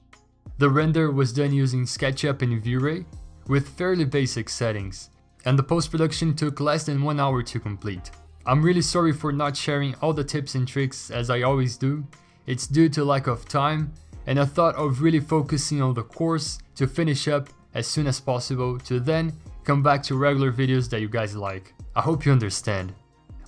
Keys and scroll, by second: 2.4 v, 8.0 b, 8.3 x, 9.2 ctrl+z, 10.5 ctrl+alt+g, 11.6 ctrl+z, 12.3 ctrl+z, 19.7 ctrl+z, 21.2 ctrl+alt+g, 21.2 b, 21.7 alt+BackSpace, 22.2 ctrl+z.